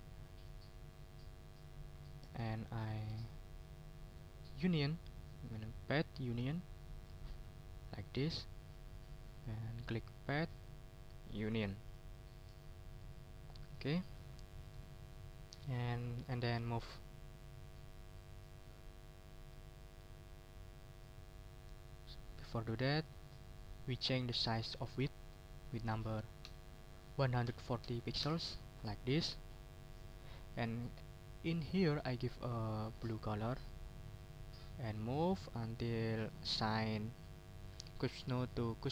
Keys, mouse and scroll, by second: 0.2 ctrl+click, 1.1-2.2 ctrl+scroll up 6, 2.2 ctrl+shift+click, 2.7 ctrl+shift+click, 3.1 ctrl+shift+click, 3.5-3.9 ctrl+shift+scroll down 3, 5.1 click, 6.4 click, 6.8 click, 7.3 click, 8.0 ctrl+z, 8.3 ctrl+scroll down 2, 8.9 ctrl+click, 10.5 click, 11.4 click, 11.8 click, 12.8 ctrl+scroll up 2, 13.3 ctrl+scroll down 2, 13.7 ctrl+middle click, 14.5 middle click, 15.3 ctrl+middle click, 15.6 ctrl+scroll down 2, 15.9 ctrl+middle click, 16.8-18.4 ctrl+drag, 19.7 middle click, 22.9 click, 25.3 ctrl+a, 26.4 1, 27.4 4, 27.8 0, 28.2 Return, 28.8 click, 30.0 click, 33.0 click, 34.2 ctrl+scroll up 2, 34.8-35.9 ctrl+drag, 36.1-38.9 drag.